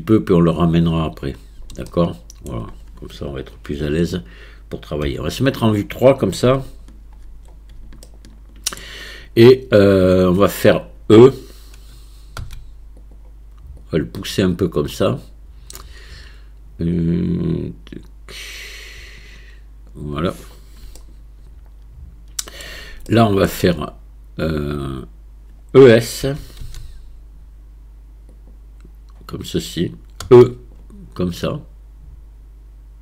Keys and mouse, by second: 0.0 click, 1.9 shift+middle click, 2.2 shift+middle click, 3.8 KP_1, 5.0 KP_3, 8.0 shift+middle click, 8.8 click, 8.8 right click, 12.4 e, 13.8-19.9 drag, 21.0-22.6 shift+middle drag, 23.1 shift+middle click, 26.3 e, 30.2 e, 31.4-33.0 drag.